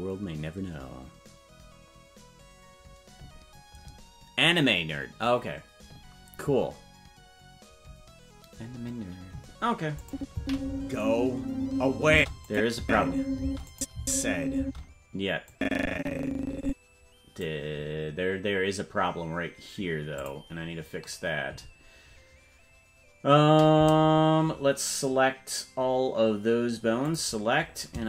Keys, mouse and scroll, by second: 10.0 click, 10.3 space, 12.1-14.6 typing, 12.4 click, 13.7 click, 15.5-17.4 drag, 20.2 click, 27.0 click.